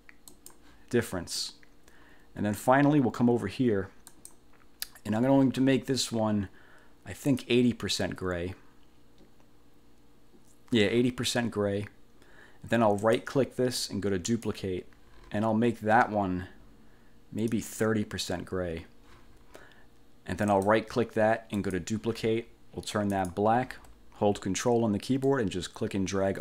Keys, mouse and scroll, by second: 0.4 click, 1.5-2.9 middle drag, 4.2 click, 7.4 click, 13.1 click, 14.4 click, 17.6 click, 20.6 click, 21.6 click, 23.2 click, 25.4-26.4 ctrl+drag.